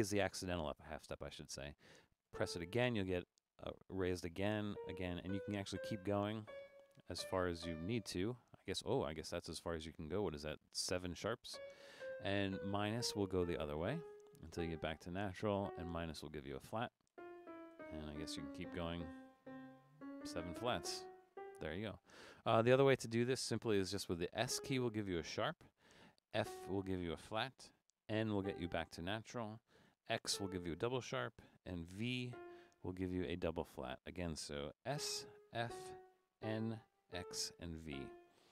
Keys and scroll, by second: 5.2-7.6 typing, 11.5-14.5 typing, 15.6 typing, 16.9-21.3 typing, 24.4 s, 26.5 f, 28.4 n, 30.4 x, 32.3 v, 34.9-37.9 typing.